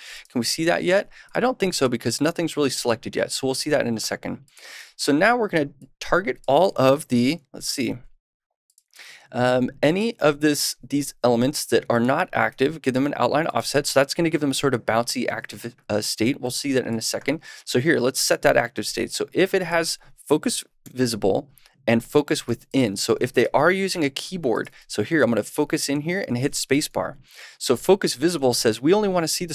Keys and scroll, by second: 7.7 super+/, 12.4 super+s, 20.7 super+/, 22.4 super+s.